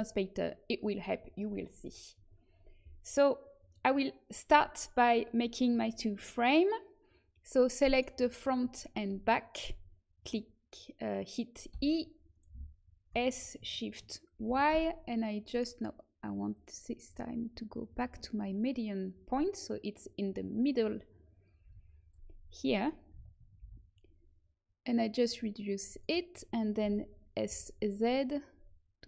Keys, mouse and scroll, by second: 7.5-9.2 drag, 7.9-11.6 right drag, 8.2-11.6 middle drag, 11.6 e, 13.0 s, 16.5-21.6 drag, 21.6 KP_1, 23.1 s, 26.7 s.